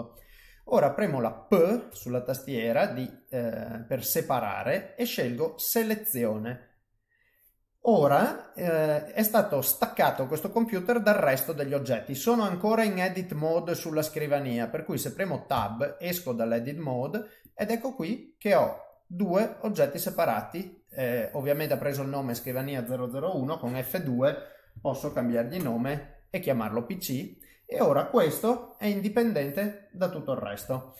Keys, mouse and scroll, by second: 1.9 p, 15.5 Tab, 16.2 middle click, 17.4 click, 17.9 click, 18.9 click, 19.8 click, 23.7 F2, 27.1 middle click, 28.5 g, 30.6 ctrl+z.